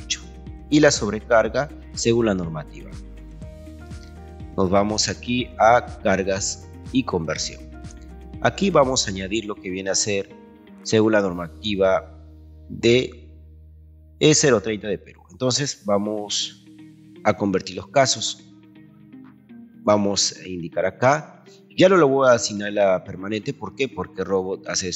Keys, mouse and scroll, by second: 6.6 click, 19.7 click.